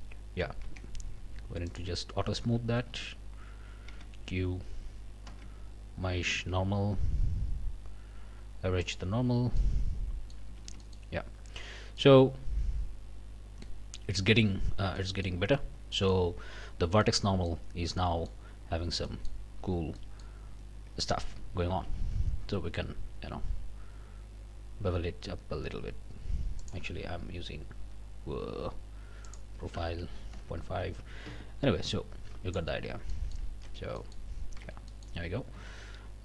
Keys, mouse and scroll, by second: 0.6 Tab, 1.2 q, 1.7 middle click, 2.2 Tab, 2.9 a, 3.9 q, 5.3 q, 8.8 scroll down 2, 8.8 click, 9.6 click, 10.1 middle click, 10.5 click, 10.5 a, 10.8 click, 12.0-13.8 drag, 15.0 click, 15.9 click, 16.1 scroll up 1, 17.0 click, 17.7 scroll up 1, 18.0 middle click, 18.7 scroll down 1, 19.0 middle click, 19.6 a, 20.0 middle click, 21.7 ctrl+b, 26.6 click, 29.2 click, 30.8 KP_Decimal, 30.9 KP_5, 31.2 KP_Enter, 31.9 click, 33.1 click, 33.6 Tab, 34.0 click, 34.6 Tab, 34.9 click, 35.5 a.